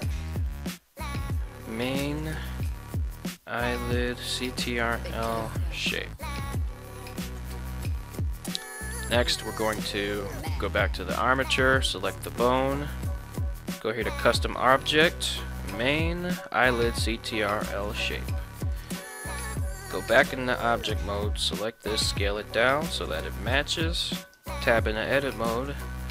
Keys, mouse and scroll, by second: 10.2 right click, 10.7 ctrl+Tab, 13.6 click, 14.5-17.0 drag, 19.4 ctrl+Tab, 19.8 right click, 20.8 s, 24.2 click, 24.4 Tab, 25.5 a.